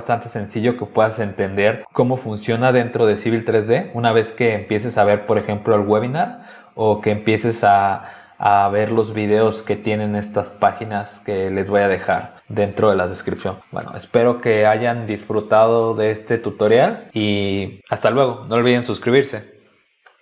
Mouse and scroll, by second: 0.7 scroll up 2, 4.8 click, 7.7 click, 8.3 scroll down 2, 8.9-9.9 scroll up 5, 10.3 scroll up 1, 11.0-11.7 scroll up 2.